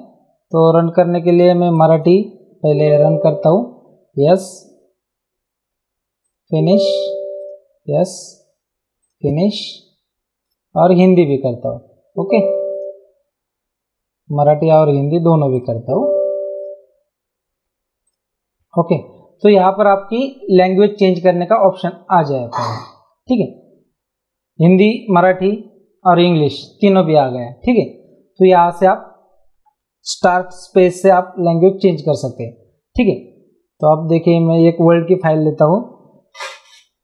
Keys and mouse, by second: 1.7 click, 10.4 click, 20.8 click, 28.0 click, 35.1 click.